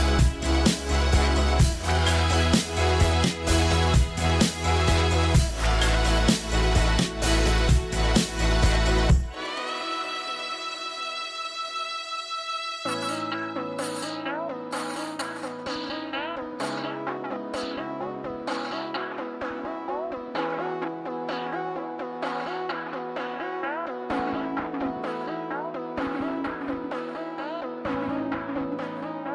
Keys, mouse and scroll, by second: 5.4 scroll up 1, 6.2 scroll up 1, 6.3 middle click, 15.9 scroll down 1, 27.6 scroll up 1, 28.1 scroll down 1.